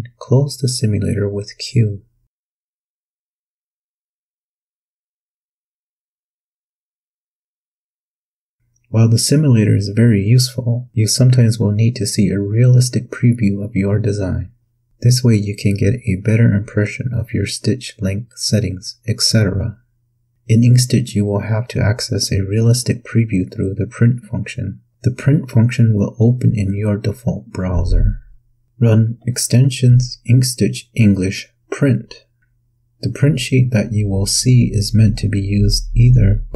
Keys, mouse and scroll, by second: 6.7 click, 8.0 click, 25.7 click, 28.6 click, 33.5 click.